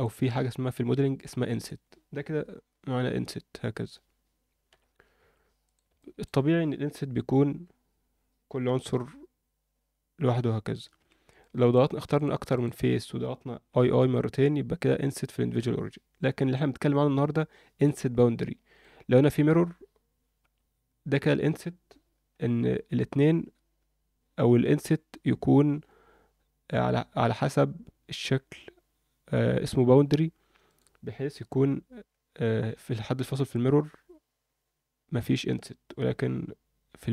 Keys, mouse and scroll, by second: 2.7 i, 5.6 click, 6.0 middle click, 7.1 i, 11.4 middle click, 12.1 shift+click, 12.5 shift+click, 13.7 i, 17.7 click, 18.1 alt+middle click, 20.4 i.